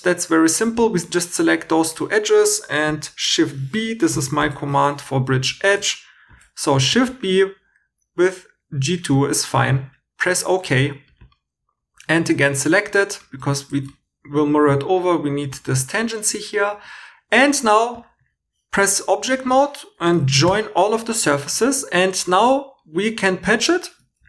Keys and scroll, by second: 3.8-6.3 typing, 11.9 e, 13.1-14.2 typing, 16.7 2, 17.5 Tab, 20.4 j, 21.2 2.